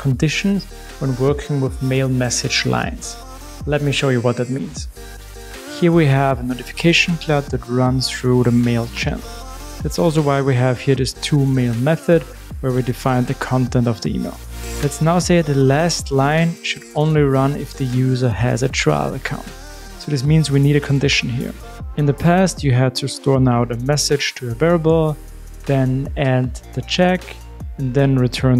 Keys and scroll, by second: 25.4 Return, 26.3 alt+shift+Up, 27.7 alt+shift+Up.